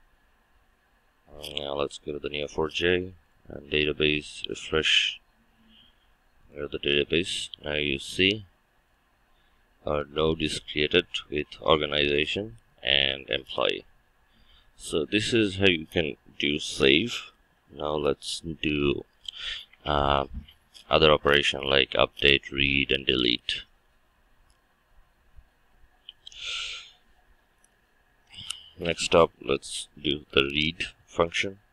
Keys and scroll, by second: 28.8 ctrl+shift+F12.